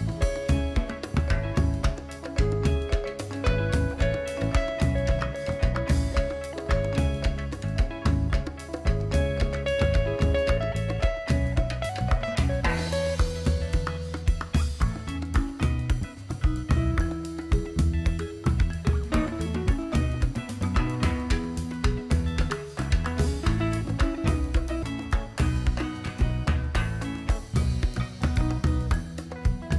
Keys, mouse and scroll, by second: 0.6 click, 16.3-18.3 drag, 19.3-20.2 scroll up 2, 20.7 click, 21.6 alt+click, 22.6-23.8 alt+drag, 23.8 alt+scroll down 1, 24.0 alt+scroll up 1, 24.2 alt+click, 24.9 alt+scroll down 1, 25.1 alt+scroll up 1, 25.4 alt+click, 26.2 alt+scroll down 1, 26.4 alt+scroll up 1, 26.9-28.5 drag, 28.5 alt+click, 29.2 alt+scroll up 1, 29.5 click.